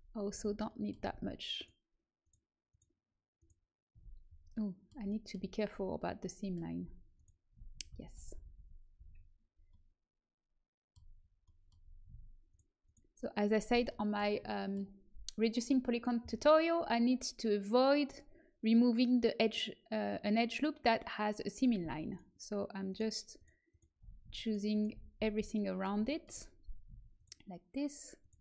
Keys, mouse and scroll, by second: 1.5-5.0 middle drag, 5.0 right click, 5.2-7.1 middle drag, 7.1-8.1 right drag, 7.8 ctrl+z, 8.1 ctrl+z, 8.3 ctrl+z, 8.5 ctrl+z, 8.9 ctrl+z, 12.4-13.9 right drag, 13.9 middle click, 14.0 right click, 14.2 middle click, 16.7 middle click, 22.0-25.0 right drag, 25.0-26.4 middle drag, 26.3 right click, 26.4 right click, 27.1-28.4 middle drag.